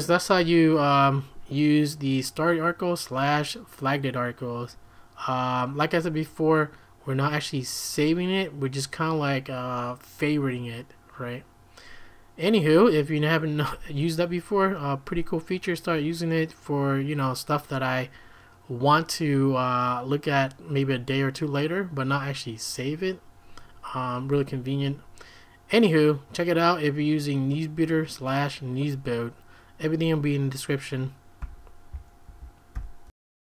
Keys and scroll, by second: 31.4 q, 32.2 ctrl+a, 32.7-33.4 typing.